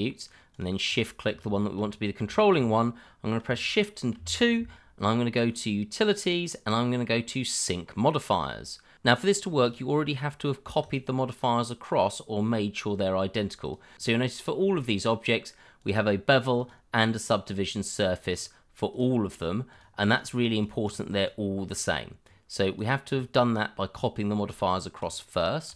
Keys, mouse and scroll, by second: 0.1 shift+middle click, 0.5 shift+click, 0.9 click, 1.6 middle click, 1.7 shift+middle click, 1.8-2.3 scroll up 1, 2.3 shift+middle click, 4.1 shift+2, 9.6 click, 13.6 click, 15.8 click, 20.2 double click, 21.6-21.9 scroll down 1, 22.2 click, 23.0-24.3 scroll up 1, 25.0 shift+click, 25.0 click.